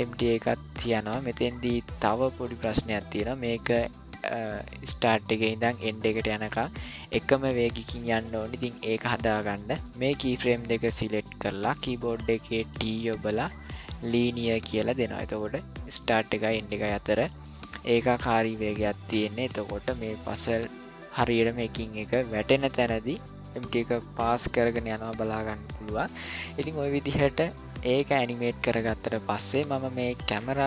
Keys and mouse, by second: 3.2 click, 4.9-9.5 drag, 12.7 t, 15.1-22.9 drag, 23.3-26.5 drag, 27.4 click, 30.2 click.